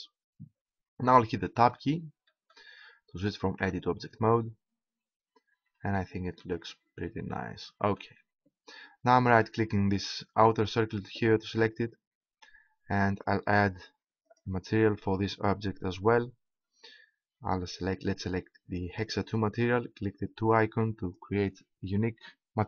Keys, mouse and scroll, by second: 1.6 middle click, 3.6 Tab, 10.3-13.3 right drag, 13.3 middle click, 14.2 right click, 20.4 click.